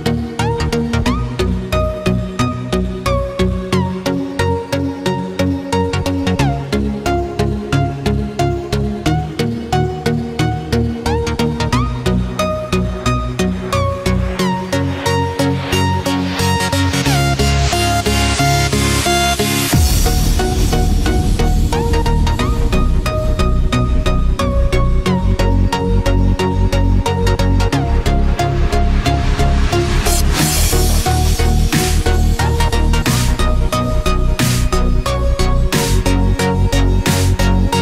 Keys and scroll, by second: 1.3 ctrl+0, 2.1 ctrl+=, 14.9 ctrl+z, 30.2 ctrl+=, 30.7 ctrl+space, 31.2 ctrl+=.